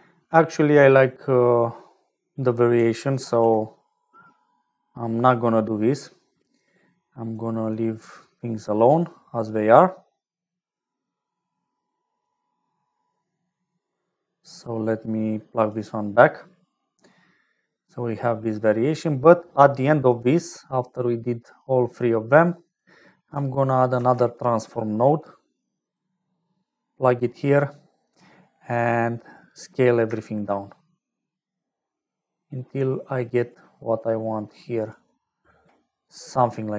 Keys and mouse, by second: 0.4 middle click, 1.4 middle click, 3.6 ctrl+z, 7.4-8.5 drag, 9.8 middle click, 10.8-12.3 drag, 14.6-15.7 drag, 18.8 middle click, 19.1 middle click, 19.6 middle click, 20.4-21.6 drag, 21.9-22.9 drag, 23.9 shift+a, 27.7 click, 29.6-35.0 drag, 36.3-36.7 middle drag.